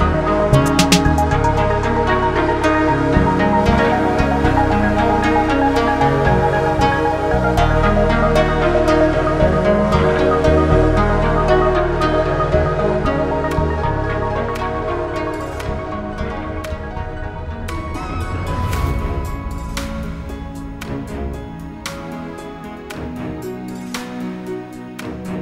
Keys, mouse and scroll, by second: 0.0-3.2 typing, 3.8 click, 5.3 click, 7.9 shift+click, 11.8 typing, 12.8 click, 14.5 click, 14.7 double click, 15.9 ctrl+a, 17.0-18.8 typing, 19.3 click, 19.5 double click, 20.6 ctrl+a, 20.9-25.1 typing.